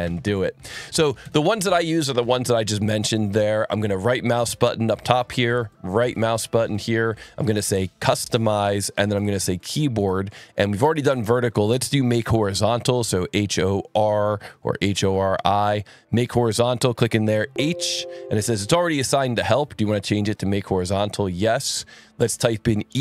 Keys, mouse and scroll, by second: 0.0 Escape, 0.0 click, 1.2 ctrl+z, 1.6 click, 2.9 click, 3.6-4.1 scroll, 4.8 alt+1, 5.1 alt+click, 5.4 ctrl+shift+click, 6.6 ctrl+alt+1, 7.2 right click, 8.2 click, 9.5 click, 11.1 click, 12.2-13.1 typing, 14.9 i, 16.1 scroll, 16.8 click, 17.3 h, 20.7 click, 21.9 click, 22.9-23.0 typing.